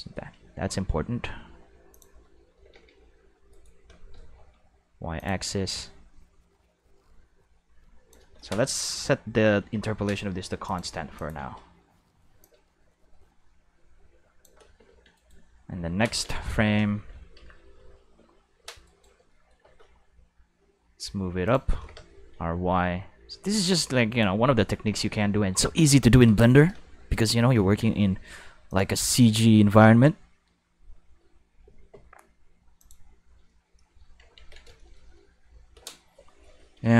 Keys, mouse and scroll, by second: 0.3 g, 1.9 click, 2.5-4.2 typing, 3.5 right click, 5.1 click, 5.6-8.1 drag, 9.6 t, 10.6 click, 11.1 click, 11.4 space, 12.3 space, 12.4-14.4 drag, 15.1 right click, 18.8 right click, 20.3 g, 21.4 click, 21.7 r, 21.9 y, 22.0 y, 24.1 click, 25.0 shift+middle drag, 26.8 middle click, 27.0 middle click, 28.7 click, 28.7-31.2 middle drag, 32.8 click, 34.3 ctrl+s.